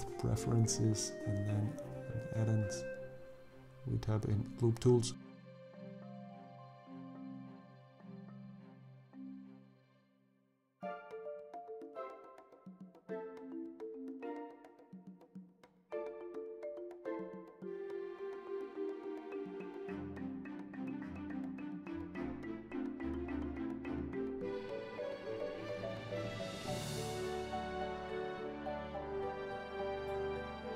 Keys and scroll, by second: 0.9 l, 1.3 o, 1.8 p, 8.0 i, 11.4 e, 17.4 i, 20.5 ctrl+r, 23.7 ctrl+r.